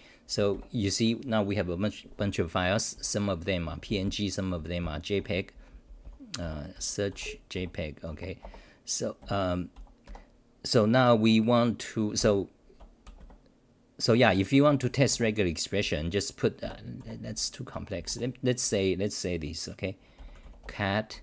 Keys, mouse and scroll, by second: 2.9-7.6 typing, 8.1 Home, 8.4 Return, 9.2 f, 9.7 g, 10.0 2, 12.2 ctrl+g, 14.7 Return, 14.9 Return, 15.1 Return, 15.8 t, 16.6 6, 17.0 e, 17.7 Home, 18.0 u, 21.1 Home.